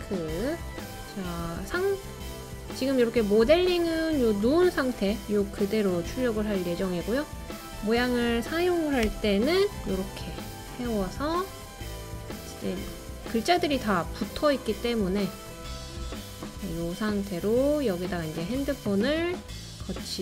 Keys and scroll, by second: 9.1 d.